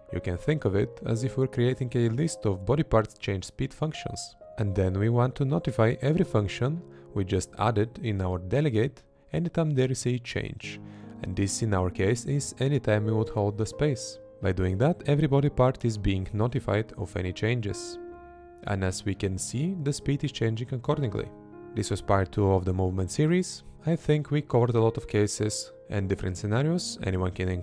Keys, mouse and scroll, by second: 0.2 space, 0.9 Right, 2.4 Left, 2.7 Left, 5.3 space, 6.5 Left, 8.3 Right, 9.8 Right, 10.7 Left, 11.2 Right, 11.6 Left, 12.4 Right, 12.9 Left, 14.0 Right, 15.5 Left, 18.3 Left, 19.7 Right.